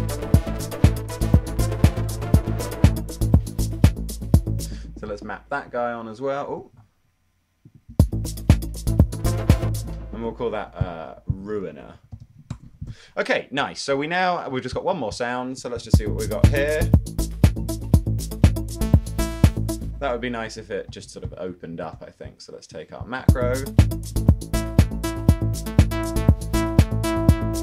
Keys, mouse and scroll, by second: 6.8 super+z, 8.2 space, 10.4 space, 11.6-12.9 typing, 19.6 super+z, 20.8-22.0 typing, 23.3 space.